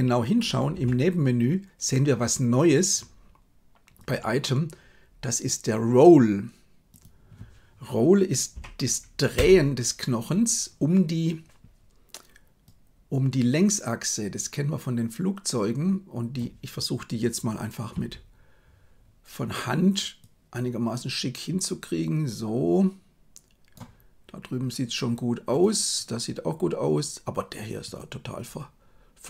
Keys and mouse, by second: 0.7 n, 6.9-9.4 drag, 12.7-16.3 drag, 17.8 KP_3, 20.3-23.6 drag, 27.8 right click.